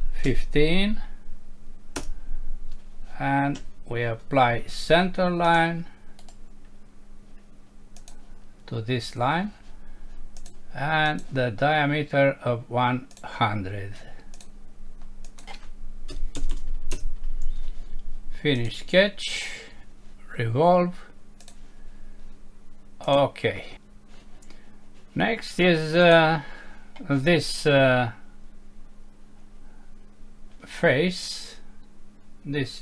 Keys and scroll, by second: 2.0 Return, 3.6 Escape, 16.9 Return.